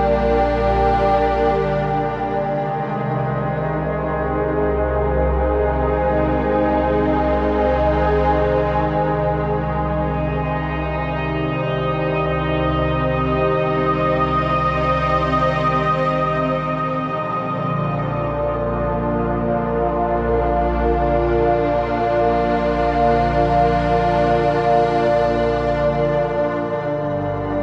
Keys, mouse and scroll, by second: 0.1-0.7 typing, 0.4 click, 0.9 click, 3.0 Return, 7.8 click, 7.8 typing, 8.1 alt+click, 9.1 alt+click, 9.9 ctrl+z, 10.8 ctrl+d, 11.3 ctrl+z, 12.1 click, 12.2 click, 12.4 space, 12.5 click, 14.3 ctrl+z, 14.8-16.9 alt+drag, 16.9-18.5 alt+drag, 18.5-19.9 alt+drag, 20.7 alt+click, 22.4 alt+click, 23.3 z, 23.4 click, 23.6 space, 23.7 click, 27.3 z, 27.5 click.